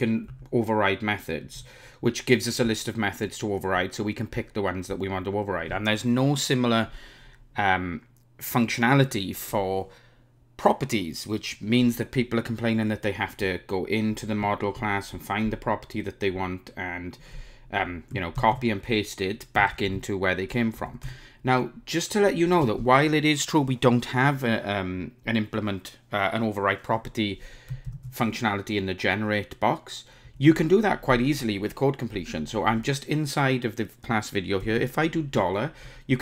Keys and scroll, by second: 14.1 super+b, 18.5 super+c, 19.7 ctrl+shift+super+e, 27.9 super+n.